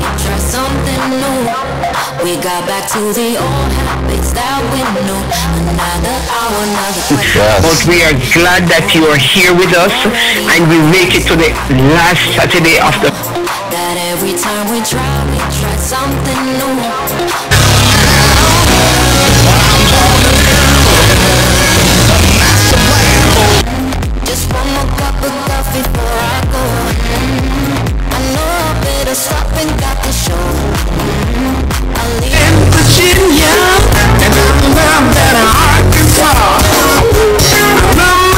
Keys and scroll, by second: 13.1 Page_Down, 23.6 Page_Down.